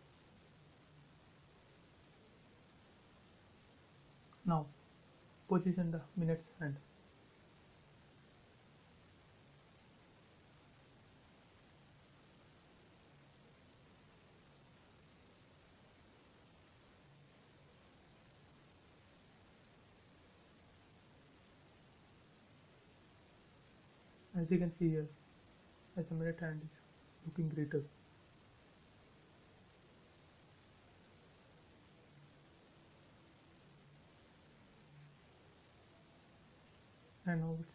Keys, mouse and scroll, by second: 0.7 scroll down 1, 1.6 middle click, 2.1 scroll down 1, 2.7 shift+middle click, 3.2-3.9 scroll up 1, 3.9 click, 4.8-5.3 scroll up 1, 5.5 m, 5.6 scroll up 1, 8.6 click, 8.8 scroll down 1, 12.5-13.3 scroll down 1, 16.2 scroll up 1, 18.5 click, 18.6 space, 18.8-19.1 scroll down 1, 19.7 scroll down 1, 20.4 shift+middle click, 21.5-22.8 middle drag, 22.8 scroll down 1, 24.8 click, 25.0-25.3 scroll up 1, 28.5 click, 30.2 right click, 31.3 click, 31.9 space, 32.2 click, 33.1 m, 33.5 click, 33.8 scroll down 1, 35.9 scroll up 1, 36.3 shift+middle click, 37.1 scroll up 1.